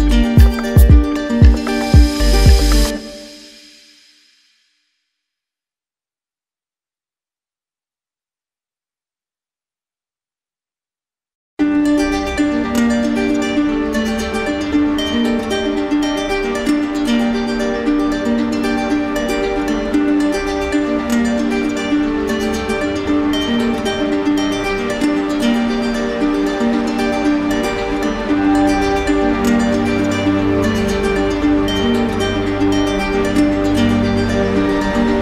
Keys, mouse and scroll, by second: 0.4 alt+click, 0.5 alt+click, 1.4 alt+click, 2.5 click, 3.6 alt+click, 4.4 click, 5.5 alt+click, 6.7 alt+click, 7.8 alt+click, 8.4 click, 8.8 alt+click, 9.8 alt+click, 10.7 alt+click, 12.0 alt+click, 13.1 alt+click, 14.5 alt+click, 15.9 alt+click, 17.1 alt+click, 18.3 click, 19.9 alt+click, 21.3 alt+click, 22.5 alt+click, 23.6 alt+right click, 24.3 alt+click, 25.7 alt+click, 26.4 click, 27.7 alt+click, 28.5 click, 29.0 click, 29.5 alt+click, 29.6 alt+click, 30.8 alt+click, 32.3 ctrl+z, 32.3 alt+click, 33.5 alt+click, 35.1 alt+click.